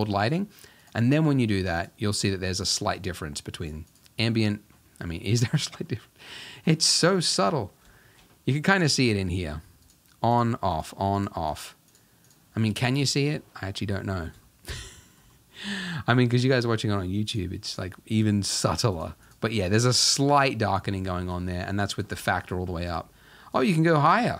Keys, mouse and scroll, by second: 1.8 click, 2.2 click, 2.7 click, 3.0 click, 3.9 click, 4.3 middle click, 4.7-5.3 scroll up 2, 5.3 middle click, 5.4-5.8 scroll down 3, 5.8-6.9 middle drag, 6.9 scroll down 2, 7.2 middle drag, 7.4-8.0 scroll up 1, 8.0 shift+middle drag, 8.3-9.2 scroll up 1, 9.2-9.9 scroll up 1, 10.4 click, 10.8 click, 11.2 click, 11.5 click, 11.9 click, 12.3 click, 12.6-13.1 scroll down 4, 13.1 shift+middle drag, 13.4-13.8 scroll up 2, 13.8-14.3 middle drag, 14.3 scroll down 1, 14.5-15.7 shift+middle drag, 15.7-16.7 scroll up 1, 16.7-17.3 scroll up 1, 17.3 click, 17.7 click, 18.2 click, 18.5 click, 19.0 click, 19.3 click, 19.6 click, 20.0 click, 21.5-22.9 drag.